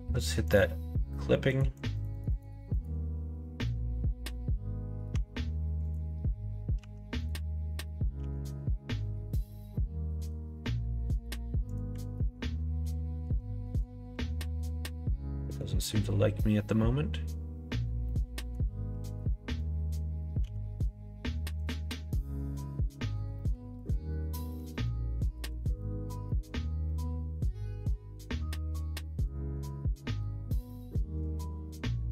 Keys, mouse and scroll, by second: 0.5 click, 1.5 click, 1.8 click, 2.0 click, 2.2 click, 2.3 click, 2.7 click, 5.1 Tab, 5.8 click, 6.8 1, 8.2 g, 12.0 ctrl+z, 12.4 middle click, 12.8 g, 14.5 middle click, 14.5 scroll up 1, 14.8 scroll down 1, 15.3 middle click, 15.6 scroll down 1, 18.0 middle click, 20.4 g, 22.0 ctrl+z, 22.7 middle click, 23.3 middle click, 24.1 middle click, 24.8 middle click, 26.8 middle click, 29.5-31.2 middle drag.